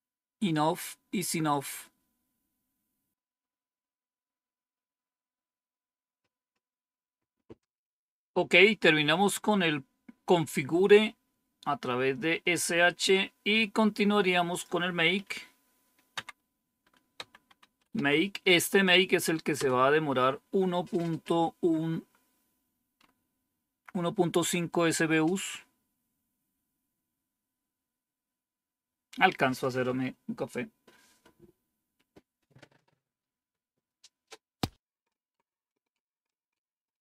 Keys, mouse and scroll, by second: 12.7-13.5 scroll down 1, 14.4 click, 15.1 Up, 16.0 Down, 16.8-18.3 typing, 19.5 Return, 21.8-22.6 scroll up 1, 22.6-23.7 scroll up 1, 25.9-26.6 scroll down 2, 26.6-27.6 scroll down 1, 36.3-37.0 scroll down 2.